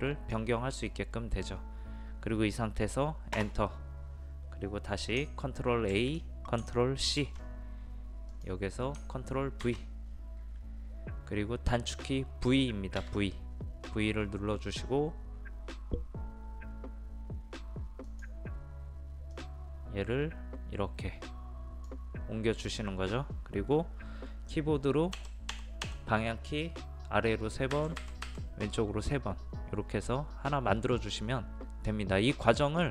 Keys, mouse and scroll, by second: 3.3 Return, 5.9 ctrl+a, 7.2 ctrl+c, 8.3 click, 9.6 ctrl+v, 13.0 v, 18.0-22.0 drag, 25.1 Down, 25.5 Down, 25.8 Down, 27.7 Right, 28.0 typing.